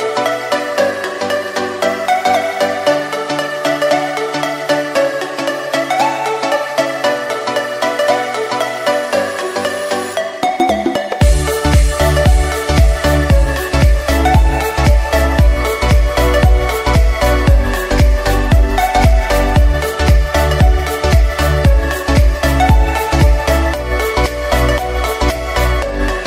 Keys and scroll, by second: 1.0 o, 18.9 Escape, 21.9 Escape.